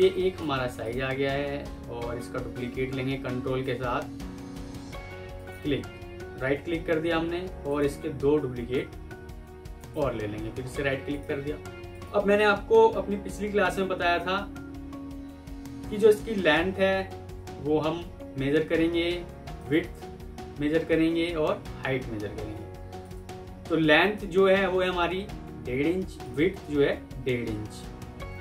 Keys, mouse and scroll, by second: 3.5 ctrl+click, 5.3 ctrl+right click, 7.6 shift+click, 9.6 ctrl+right click, 10.5-10.9 alt+scroll up 1, 28.2-28.4 alt+scroll up 1.